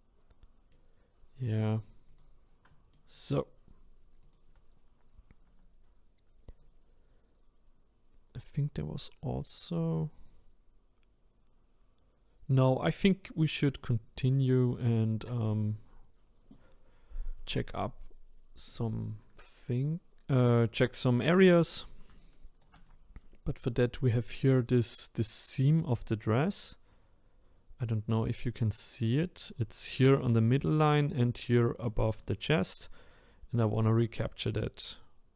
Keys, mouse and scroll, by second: 2.1 click, 2.9-4.2 middle drag, 4.2 click, 6.6-9.7 right drag, 20.7-22.1 drag, 22.1-27.3 shift+right drag, 32.2-35.3 right drag.